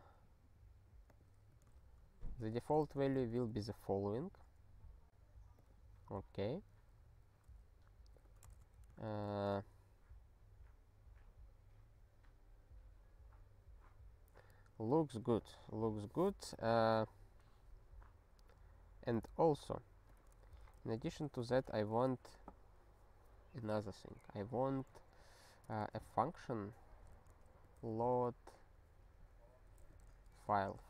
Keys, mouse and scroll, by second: 1.1 click, 1.5 f, 2.4 BackSpace, 2.7 space, 2.8 ctrl+y, 3.2 ctrl+s, 5.6 click, 7.2 ctrl+f, 8.2 ctrl+b, 8.5 alt+shift+s, 9.2 ctrl+s, 20.0 click, 20.5 ctrl+b, 20.8 Return, 21.1 ctrl+alt+f, 21.4 Return, 21.8 (, 24.5-25.6 typing, 26.8-28.1 typing, 30.0-30.8 typing.